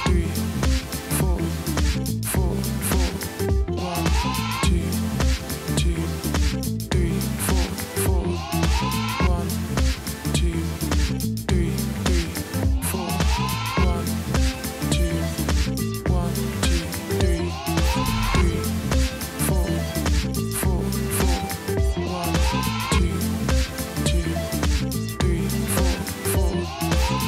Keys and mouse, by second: 1.5 click, 2.9 click, 4.0 -, 5.1 click, 6.6 click, 7.6 click, 8.7 click, 11.4 click, 12.8 click, 13.2 [, 19.0 Tab, 20.4 Tab, 21.3 Tab, 22.9 Tab, 25.6 space.